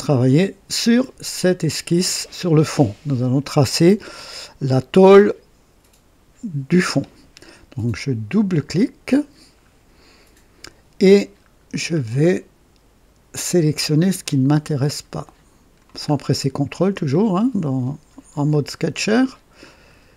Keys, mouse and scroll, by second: 8.5 click, 9.6-9.9 scroll up 2, 11.6 scroll down 2, 12.0-12.8 right drag, 14.1 click, 16.0 scroll up 2, 19.0 click, 19.6 right click.